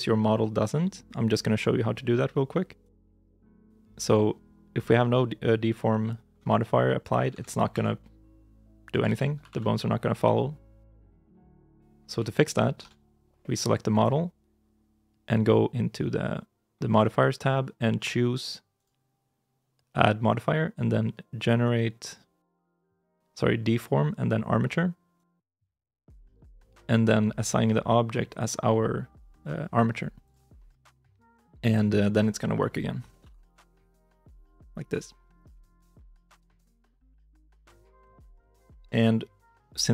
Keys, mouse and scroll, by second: 3.2 double click, 6.9 right click, 7.2 ctrl+Tab, 7.3 right click, 7.6 g, 8.9 ctrl+z, 9.2 r, 11.1 ctrl+z, 12.6 ctrl+Tab, 13.8 right click, 31.3 right click, 31.5 ctrl+Tab, 31.8 right click, 33.1 r, 35.4 ctrl+z, 36.4 ctrl+Tab, 37.4 shift+middle click, 37.8 shift+middle click.